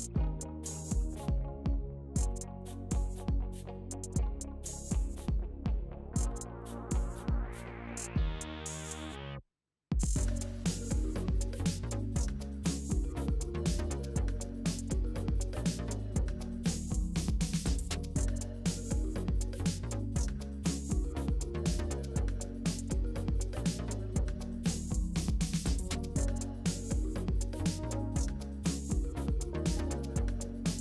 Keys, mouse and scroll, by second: 0.9-1.9 scroll up 1, 2.8-4.2 drag, 4.2 middle click, 5.2-6.2 drag, 7.4-10.5 middle drag, 10.5 ctrl+z, 12.1-13.6 drag, 13.6-14.8 middle drag, 14.8-17.8 drag, 18.0-19.4 middle drag, 19.4-20.7 drag, 20.7-22.2 middle drag, 22.2 ctrl+z, 22.7 ctrl+z, 22.9-25.2 middle drag, 25.2-28.3 drag.